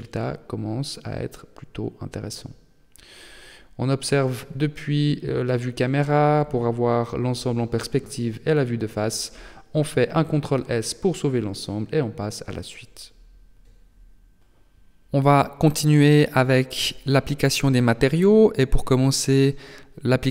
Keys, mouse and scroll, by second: 2.3 KP_0, 4.5 KP_1, 5.5-5.8 scroll down 3, 6.2 shift+middle click, 8.3 ctrl+s.